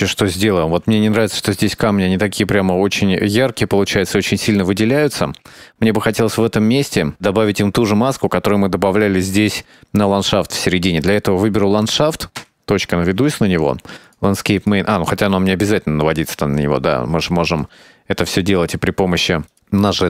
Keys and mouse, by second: 3.5 shift+middle click, 4.4 ctrl+s, 5.5 right click, 12.4 KP_Decimal, 14.6 click, 19.7 click.